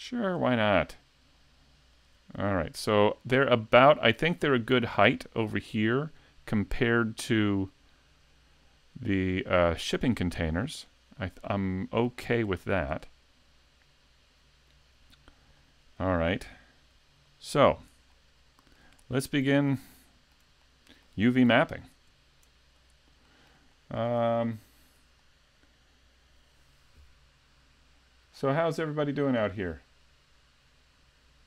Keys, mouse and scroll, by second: 1.9 shift+click, 2.5 middle click, 12.3-12.8 scroll down 3, 12.6 shift+middle click, 13.1 middle click, 17.3 shift+click, 17.7 scroll up 2, 18.1 shift+middle click, 19.0 middle click, 19.9 shift+middle click, 20.6 middle click, 21.5 s, 23.3 shift+middle click, 23.7 middle click.